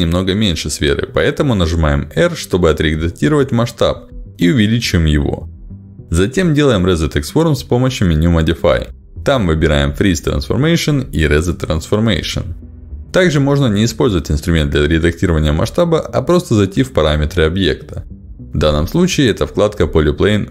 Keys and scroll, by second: 3.2 r, 5.5 r, 13.1 ctrl+z, 14.1 ctrl+z, 19.1 ctrl+alt+d.